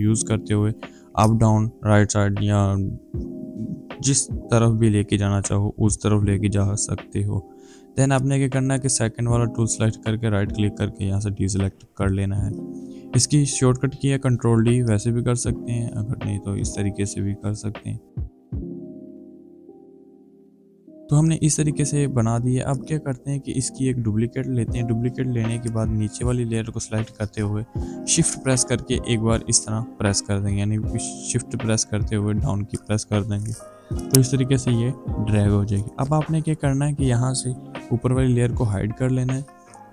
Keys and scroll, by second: 0.9 Up, 1.5 Right, 2.3 Right, 2.8 Right, 3.4 Right, 4.2 Up, 5.5 Left, 19.2 v, 19.4 shift+Down, 19.5 shift+Left, 20.1 shift+Left, 20.3 shift+Right, 20.8 ctrl+d, 24.6 ctrl+j, 28.3 shift+Down.